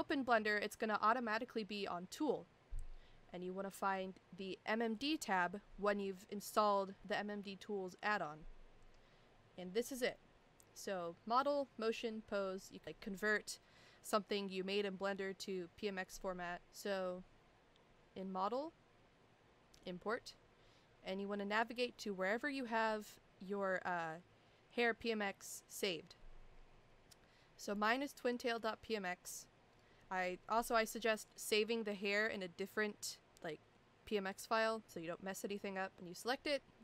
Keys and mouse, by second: 5.0 click, 19.8 click.